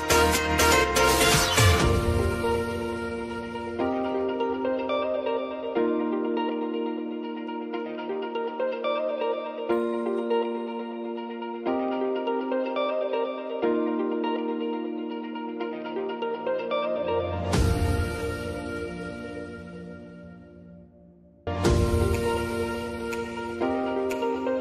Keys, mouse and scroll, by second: 0.4-3.2 drag, 4.1-7.2 typing, 8.1 ctrl+a, 8.7 click, 9.7 Return, 10.3 click, 12.4 ctrl+alt+Home, 14.1-20.4 drag, 20.4 s, 21.0-24.6 drag.